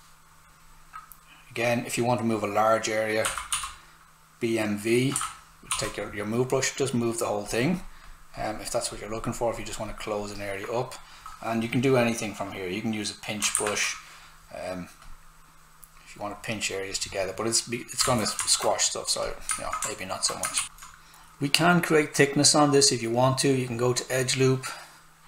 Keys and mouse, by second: 3.0-4.0 typing, 5.1-6.2 typing, 5.8 click, 13.4 alt+click, 13.5 alt+p, 15.0 click, 18.0 ctrl+z, 18.5 alt+right click, 19.2 click, 19.8 alt+right click, 20.5 shift+click, 23.7 click.